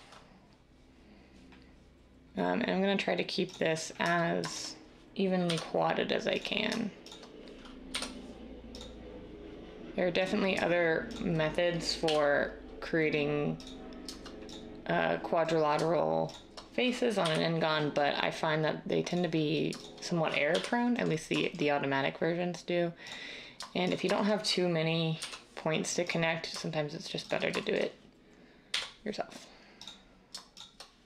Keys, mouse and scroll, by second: 5.4 j, 7.9 j, 12.0 j, 20.5 j, 25.1 j, 28.7 j.